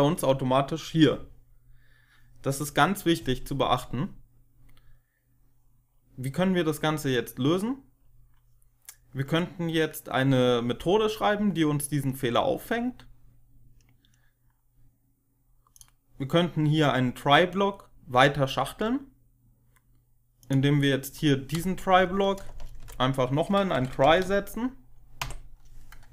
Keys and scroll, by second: 21.9 Right, 22.3 Return, 22.7 Up, 23.4-24.6 typing, 25.1 Tab.